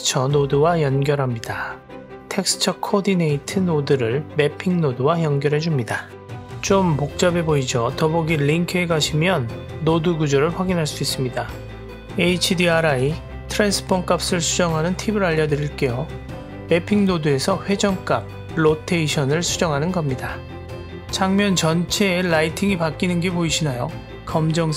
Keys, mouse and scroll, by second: 0.1 click, 0.3-1.3 drag, 2.5-3.2 drag, 8.5 middle drag, 9.1-10.1 drag, 10.4 middle click, 11.4-12.0 scroll up 1, 12.0 middle click, 13.1-14.2 drag, 14.6 middle click, 20.0-24.7 drag.